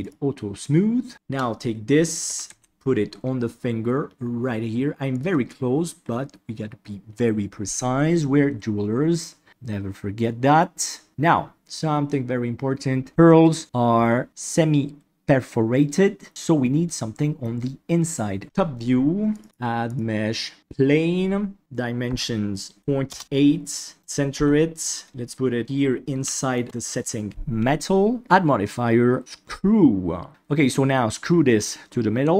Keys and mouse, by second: 2.2 g, 18.4 KP_7, 19.3-20.6 drag, 21.6-23.1 drag, 24.3 KP_1, 25.1 g, 26.3 shift+middle drag, 28.2-29.2 drag.